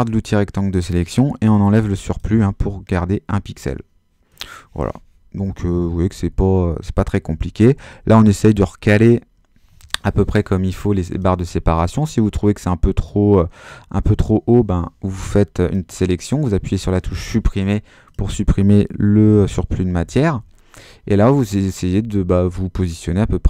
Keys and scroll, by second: 1.4 BackSpace, 5.6 Right, 7.7 Up, 8.1 Right, 8.3 Left, 8.8 Down, 14.1 BackSpace, 19.8 Down, 20.3 Up, 21.0 Left, 21.9 Down, 22.2 Up, 22.9 super+Up, 23.1 super+-.